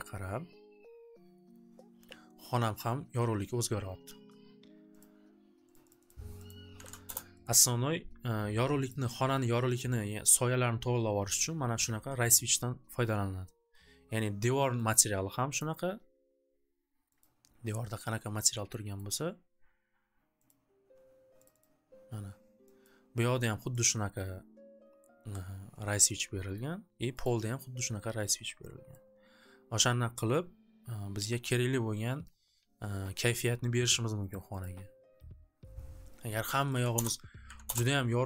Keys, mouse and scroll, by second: 5.0 click, 5.7 click, 5.9 click, 6.1 click, 6.5 click, 6.5-7.3 typing, 7.4 click, 8.8 click, 12.7 click, 14.8 scroll down 2, 14.9 click, 15.1 click, 15.7 click, 17.2 click, 18.9 click, 20.4 click, 21.5 click, 21.6 click, 22.8 click, 23.9 click, 25.4 right click, 26.5 right click, 27.3 right click, 28.1 click, 30.3 click, 34.3 click, 34.7 click, 36.5 click, 36.7 click, 36.7 2, 36.9 Return, 37.5 3, 37.7 Return.